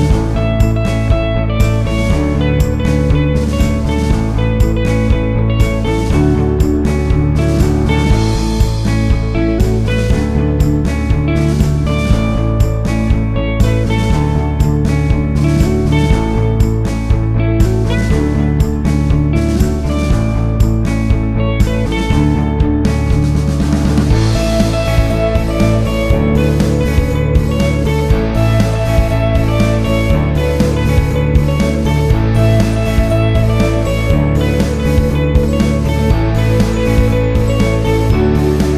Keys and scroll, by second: 0.1 Right, 1.7 Left, 8.6 ctrl+z.